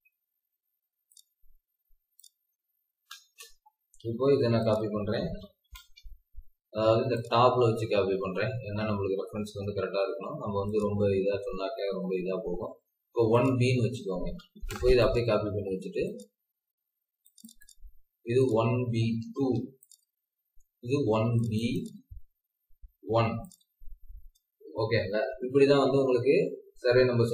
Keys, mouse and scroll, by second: 3.1 Return, 5.2-5.7 typing, 7.5-8.2 scroll down 1, 8.2 scroll up 1, 10.1-10.8 typing, 11.3 Escape, 11.5 scroll down 1, 12.5-13.3 scroll up 1, 14.2-14.5 typing, 15.6 scroll up 1, 16.3 Escape, 17.4 double click, 19.3 typing, 20.3-21.3 scroll down 1, 21.5 double click, 22.9 1, 25.6-27.3 scroll down 1.